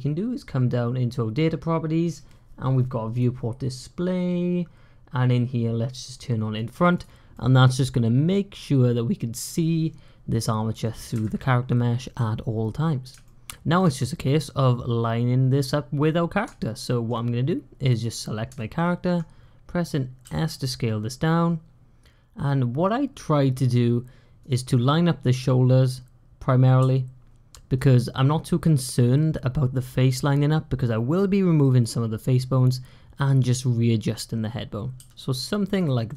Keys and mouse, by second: 6.4 click, 7.2-10.7 middle drag, 13.1-13.6 shift+middle drag, 16.4-16.9 shift+middle drag, 18.5 shift+middle click, 18.7 shift+click, 20.2 s, 26.7 s, 34.8 s.